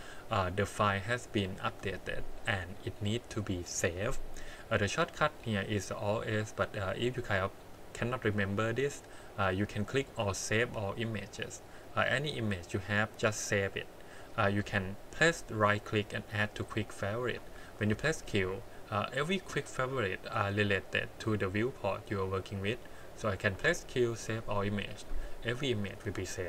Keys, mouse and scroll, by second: 17.6 click, 17.9 q, 21.5-22.6 drag, 23.5 q.